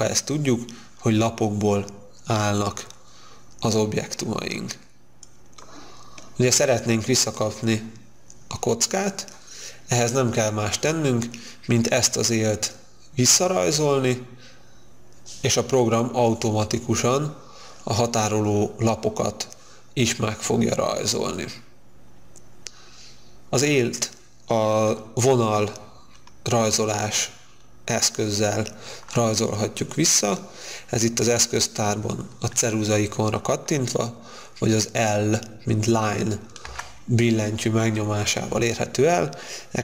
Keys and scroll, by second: 36.6 l.